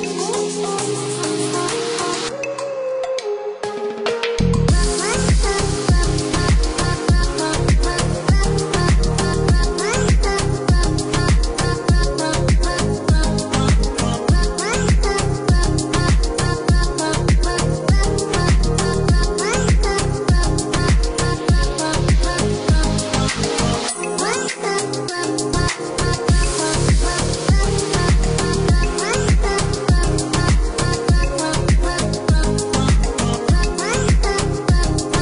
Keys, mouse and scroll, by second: 3.3 click, 6.2 click, 6.9 KP_5, 7.2 KP_0, 7.4 KP_Enter, 8.0 Escape, 9.7 click, 12.0 click, 14.9 Escape, 16.0 click, 19.3 click, 20.8 click, 21.3 Escape, 22.5 click, 23.6 click, 26.9 click, 29.9 click, 30.9 Escape, 34.3 click.